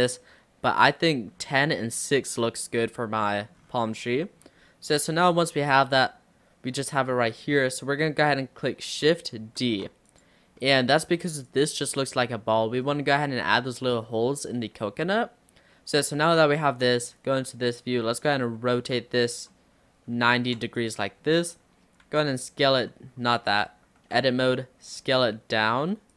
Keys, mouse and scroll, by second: 0.9-3.6 middle drag, 3.6-4.0 scroll down 4, 4.0 scroll up 3, 4.2-5.4 middle drag, 5.4 click, 5.9-7.3 middle drag, 7.3-8.0 scroll down 2, 9.7 shift+d, 10.6 middle click, 11.5 click, 12.7 middle drag, 12.9-13.3 scroll down 3, 14.1-14.7 scroll up 2, 16.9 click, 18.9 r, 21.2-22.0 scroll up 3, 22.1 s, 23.5 ctrl+z, 24.1 Tab, 24.5 d, 25.0 s.